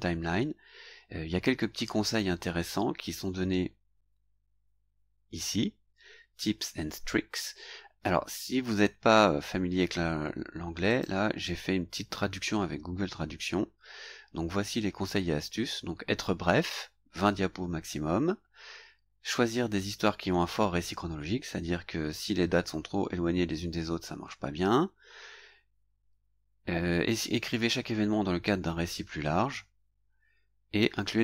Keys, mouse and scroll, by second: 2.9 scroll down 1, 3.6-3.9 scroll down 1, 4.4 scroll down 1, 4.9 scroll down 1, 10.9 click, 13.0 scroll down 1, 13.6-14.0 scroll down 2, 14.5-14.9 scroll down 2, 24.3 scroll down 2, 30.2 scroll down 2.